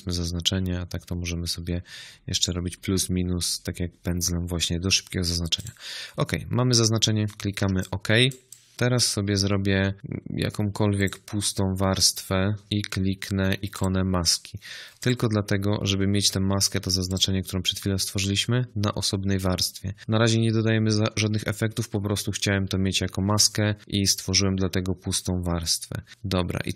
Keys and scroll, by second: 7.5 z.